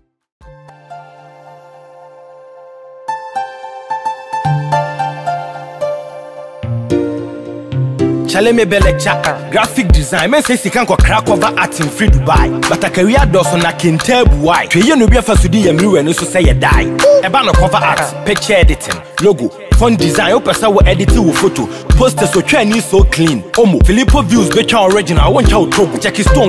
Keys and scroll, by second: 7.2 ctrl+t, 26.2 Return.